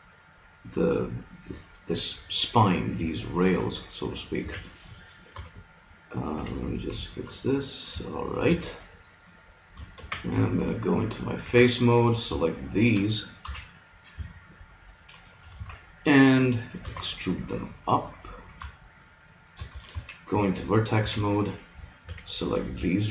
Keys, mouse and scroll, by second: 4.5 a, 5.4 b, 6.3 g, 8.5 a, 10.0 ctrl+Tab, 11.5 z, 13.5 KP_3, 15.6 z, 16.9 e, 19.9 ctrl+Tab, 21.1 a, 22.0 b, 23.0 click.